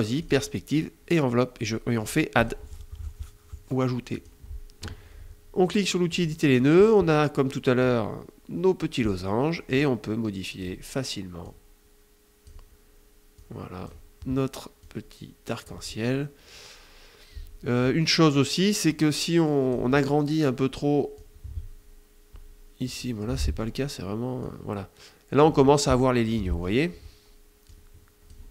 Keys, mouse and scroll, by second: 1.9 click, 3.7 click, 5.7 click, 9.2 click, 10.9-12.2 drag, 12.9 click, 14.3 click, 18.3 click, 20.7-22.5 drag, 22.7 middle click, 23.9-25.1 drag, 25.8 middle click, 27.2 click, 28.2 middle click, 28.3 click.